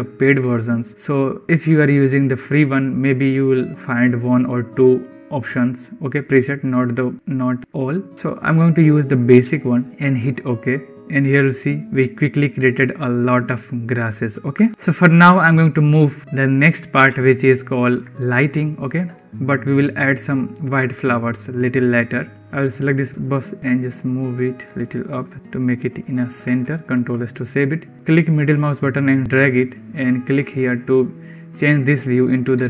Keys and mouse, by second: 14.7 n, 22.4 ctrl+z, 23.6 g, 25.0 g, 26.7 ctrl+s, 28.4 click.